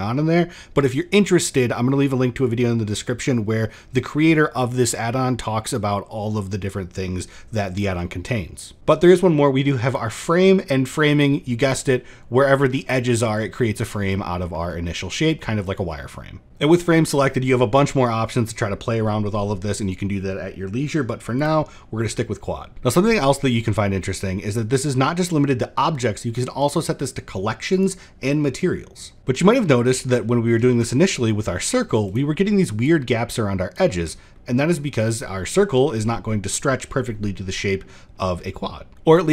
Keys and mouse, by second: 0.0-0.3 middle drag, 7.5 drag, 8.4 drag, 9.6 click, 10.1 middle drag, 10.9 click, 11.7 middle drag, 12.1 shift+middle drag, 12.5 middle drag, 13.5 middle drag, 14.1 shift+middle drag, 14.8 middle drag, 15.5-16.4 drag, 21.1 click, 22.1 middle click, 27.4 drag, 29.2 x, 29.2 middle drag, 29.7 shift+middle drag, 30.0 middle click, 30.4 shift+a, 32.6 click, 34.1 middle click, 37.5 middle click, 39.1 middle click.